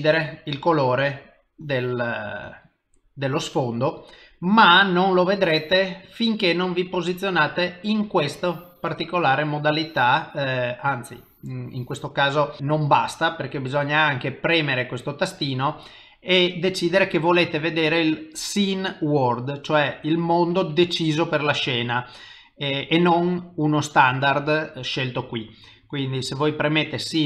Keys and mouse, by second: 0.3 click, 1.2 click, 8.7 click, 14.6 click.